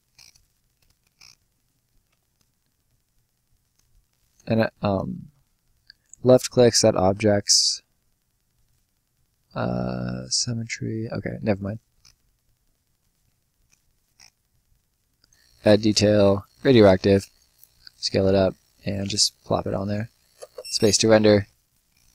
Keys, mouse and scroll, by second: 4.0 click, 11.5 click, 13.0-13.6 scroll up 1, 13.6 click, 17.3 shift+click, 20.3 space, 21.3 Escape, 21.5 scroll down 1, 21.7 middle click.